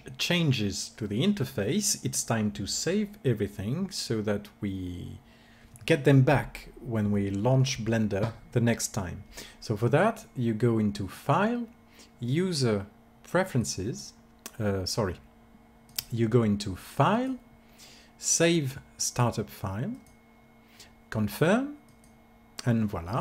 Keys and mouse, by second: 12.1-13.2 drag, 17.9-19.1 drag.